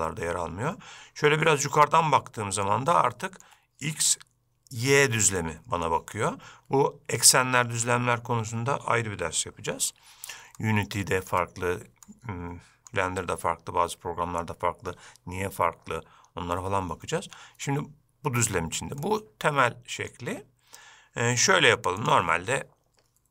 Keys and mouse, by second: 1.6-2.7 middle drag, 3.0-3.6 shift+middle drag, 5.5-5.9 shift+middle drag, 10.7-11.4 ctrl+middle drag, 12.1-13.0 shift+middle drag, 19.1-20.2 middle drag, 22.1 click.